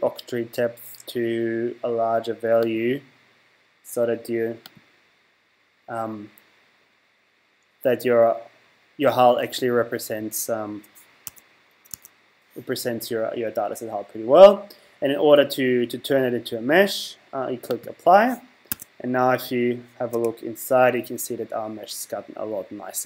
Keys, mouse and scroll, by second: 2.7 click, 4.7 click, 11.3 Tab, 12.0 Tab, 17.7 click, 18.7 Tab, 20.1 z.